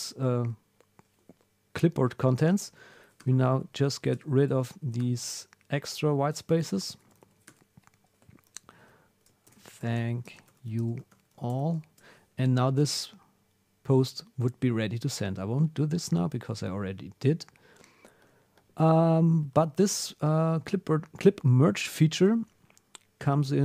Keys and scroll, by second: 2.7 Down, 2.9 super+Left, 3.6 Down, 3.9 super+Left, 4.5 Down, 4.7 super+Left, 5.6 Down, 6.3 super+Left, 7.0 Down, 7.2 super+Left, 8.6 super+Right, 11.1 shift+t, 20.0 super+Tab.